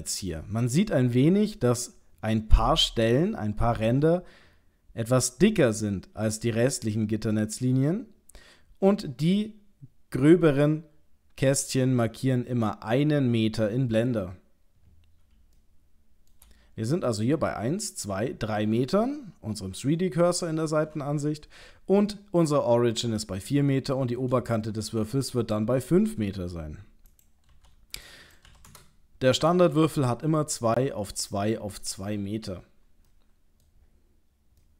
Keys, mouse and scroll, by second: 15.6 shift+middle click, 23.8 shift+middle click, 27.1 click, 33.1 middle click, 33.8-34.6 scroll down 7, 34.6 middle click.